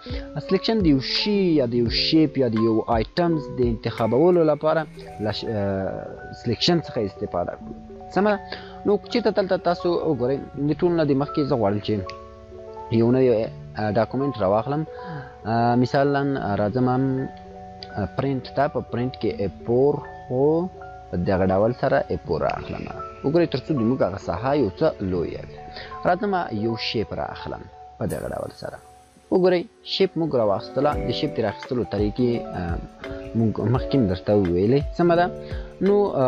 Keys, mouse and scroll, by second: 15.8 ctrl+n, 16.2 click, 19.0 click, 19.1 click, 26.6 click.